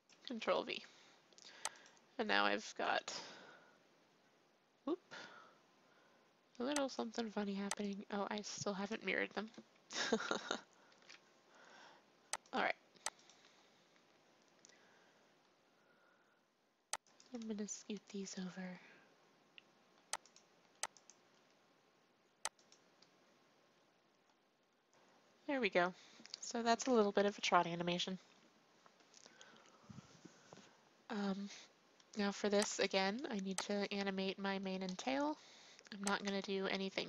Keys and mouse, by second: 0.2 ctrl+v, 1.7-3.6 drag, 6.9-10.0 drag, 10.0 ctrl+c, 10.9 ctrl+shift+v, 13.4-15.0 drag, 17.0-20.8 drag, 17.6 g, 20.9-22.7 drag, 21.3 g, 32.7-36.2 drag, 36.9-37.0 drag, 36.9 a.